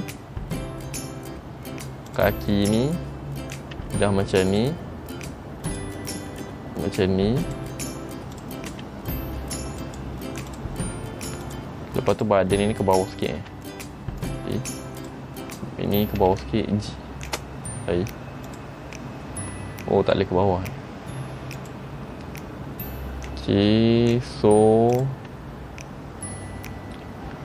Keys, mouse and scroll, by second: 2.2 click, 3.9 r, 5.8 click, 6.5 r, 8.5 click, 8.9 r, 10.6 click, 11.0 r, 12.3 click, 13.5 g, 15.1 click, 16.3 g, 18.6 click, 19.1 middle click, 21.9 middle click.